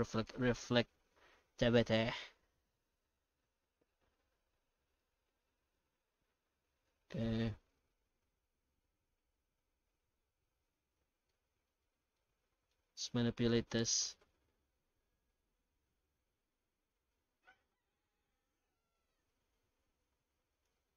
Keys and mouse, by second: 3.8 middle click, 5.0 middle click, 11.3-11.7 middle drag, 11.8-12.3 middle drag, 12.4 shift+middle drag, 13.9-18.1 drag, 18.9-20.6 drag.